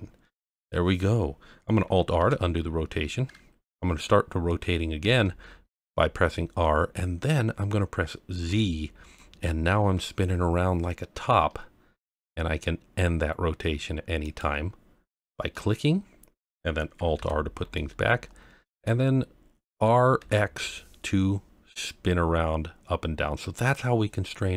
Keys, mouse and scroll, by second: 2.2 alt+r, 5.0 r, 8.5 z, 14.2 click, 15.5-16.3 middle drag, 17.1 alt+r, 17.7-18.8 middle drag, 19.7 r, 20.2 x.